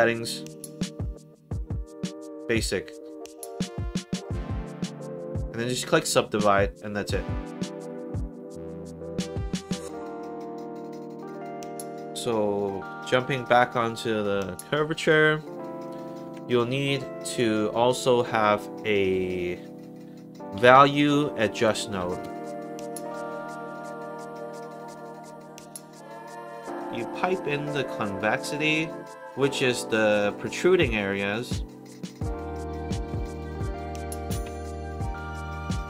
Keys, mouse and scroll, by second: 2.5 click, 3.5 click, 7.8 click, 10.5 click, 11.6 click, 13.3 click, 16.2 Tab, 20.2-21.4 typing, 21.9 Down, 22.2 Return, 24.6 click, 25.2 click, 26.6 click, 26.8 click, 27.4 click, 28.1 click, 33.2 click, 34.4 1, 35.7 middle click, 35.7 scroll down 2.